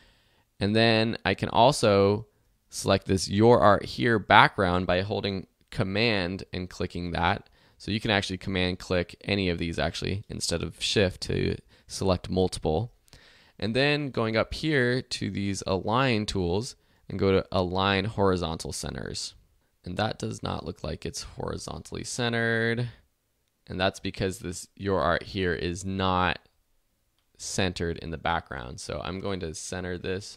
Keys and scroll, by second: 19.4 super+z, 21.4 alt+z.